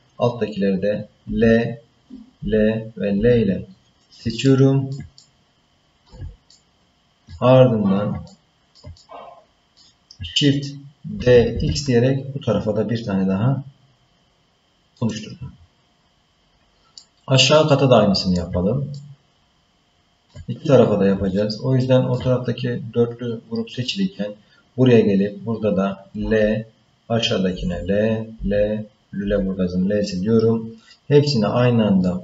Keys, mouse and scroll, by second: 1.2 l, 2.4 l, 3.1 l, 4.4 shift+middle click, 5.1 middle click, 6.5 shift+middle click, 8.2 ctrl+middle click, 9.0 middle click, 11.2 shift+d, 16.9-18.4 middle drag, 18.9-20.3 ctrl+middle drag, 21.3 shift+middle click, 26.2 l, 27.5 l, 28.3 l, 29.2 l, 30.8-32.0 middle drag.